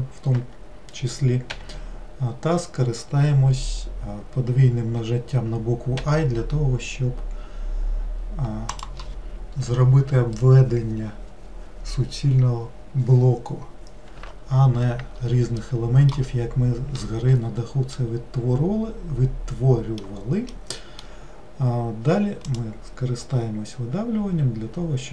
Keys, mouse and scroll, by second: 15.6-23.7 middle drag.